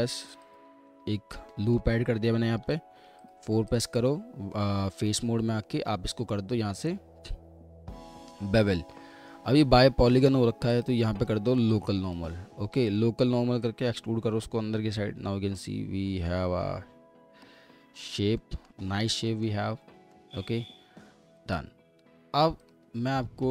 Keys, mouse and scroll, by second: 0.9 w, 1.5 alt+middle click, 2.0 scroll up 1, 2.6 4, 3.8 ctrl+double click, 4.5 alt+middle click, 17.9 scroll up 1, 18.4 alt+middle click, 18.9 scroll down 1, 19.3 middle click, 19.7 scroll up 1, 20.1 middle click, 23.0-23.5 scroll down 1.